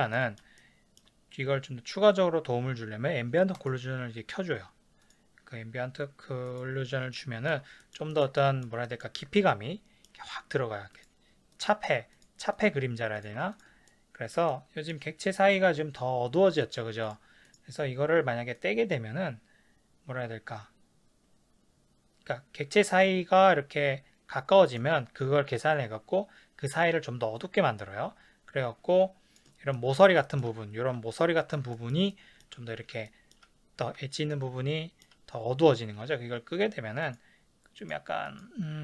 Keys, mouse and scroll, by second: 0.6-3.6 ctrl+middle drag, 3.6-5.2 drag, 6.5 click, 7.1-11.0 shift+middle drag, 11.0 click, 12.2 click, 12.6 click, 13.2 click, 13.9-16.7 shift+middle drag, 16.7 click, 17.1 click, 17.5 click, 18.6-29.7 drag, 29.7-37.1 ctrl+middle drag, 37.1 click, 37.8 click, 38.3 click.